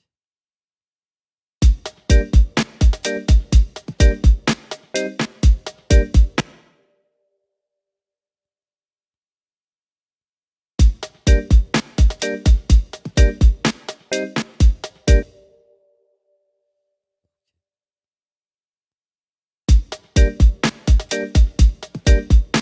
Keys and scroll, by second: 1.6 space, 6.4 space, 10.8 space, 15.2 space, 19.7 space.